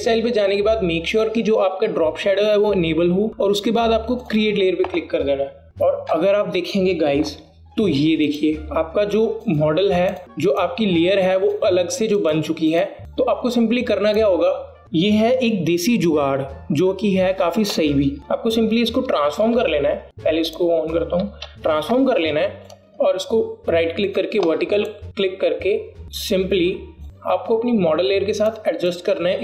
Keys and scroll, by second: 20.0 ctrl+t.